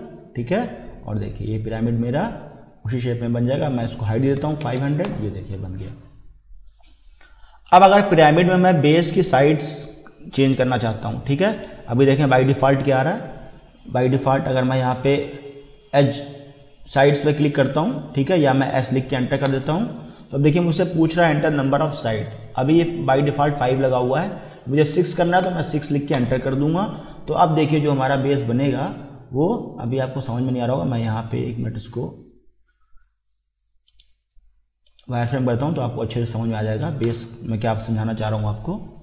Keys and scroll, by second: 4.4 5, 4.6 0, 5.1 Return, 19.1 s, 19.5 Return, 25.5 6, 26.2 Return, 32.4 Escape.